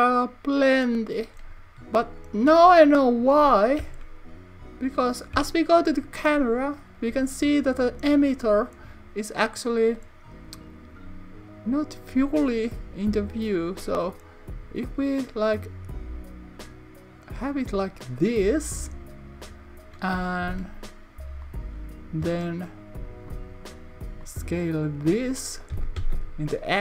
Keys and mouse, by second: 4.0 KP_0, 5.5 KP_0, 17.7 click, 20.6 Tab, 21.5 click, 23.6-25.0 shift+drag, 26.0 x.